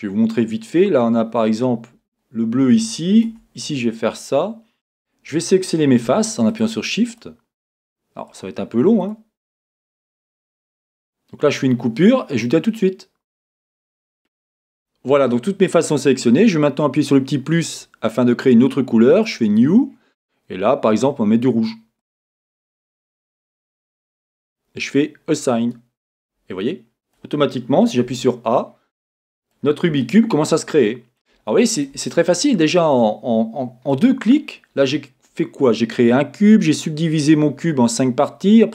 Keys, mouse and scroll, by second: 2.0-2.8 scroll up 2, 2.8-3.3 scroll up 1, 3.3 Tab, 3.8-5.0 scroll up 2, 5.0 click, 6.5-17.6 shift+drag, 17.7-26.6 drag, 26.6-38.7 middle drag, 32.1-32.8 scroll down 3, 34.3-38.4 scroll up 2.